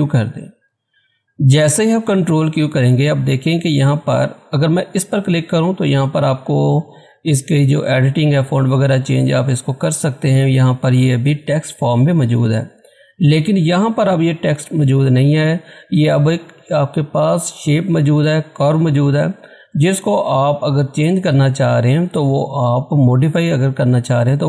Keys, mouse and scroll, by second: 4.9 click, 13.7 click, 13.7 click.